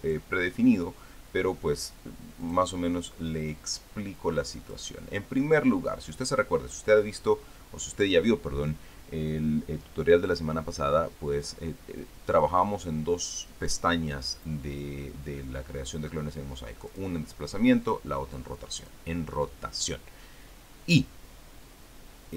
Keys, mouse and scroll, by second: 0.6 click, 2.5 click, 3.3 click, 5.5 click, 17.7 click, 18.6 click, 19.6 click.